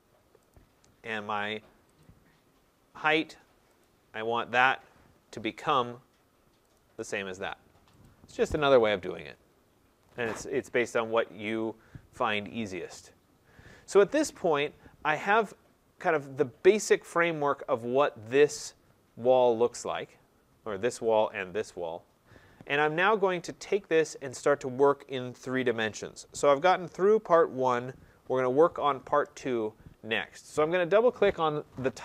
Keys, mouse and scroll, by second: 0.5 click, 2.0 click, 3.8 click, 6.8 click, 8.0 click, 10.8-11.8 scroll, 13.3-14.3 scroll, 14.3-15.7 scroll, 15.7 scroll, 16.3-18.0 scroll, 18.0-19.4 scroll.